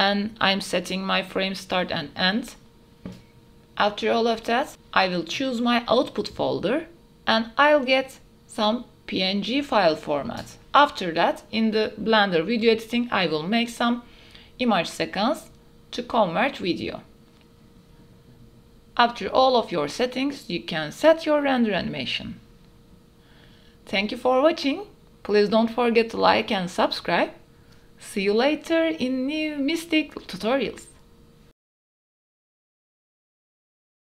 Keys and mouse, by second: 5.2 click, 10.1 click, 16.3-21.0 drag, 31.3-31.8 drag, 32.1-32.4 drag.